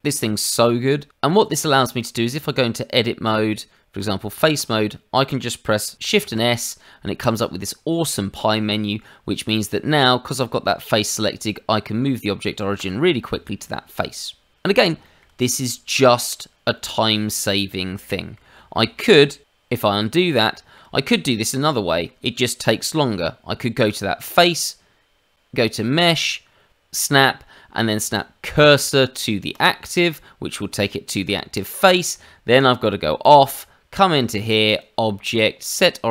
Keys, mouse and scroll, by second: 1.1 click, 1.6 middle click, 2.2 Tab, 4.5 click, 6.1 shift+s, 13.3 middle click, 15.2 shift+middle click, 15.5 middle click, 16.7-17.2 scroll up 1, 17.2 middle click, 18.7 shift+middle click, 20.1-20.4 scroll up 2, 20.5 shift+middle click, 21.4 middle click, 25.3 click, 30.5 middle click, 31.5 shift+middle click, 32.1 Tab, 33.2 click, 34.7 click.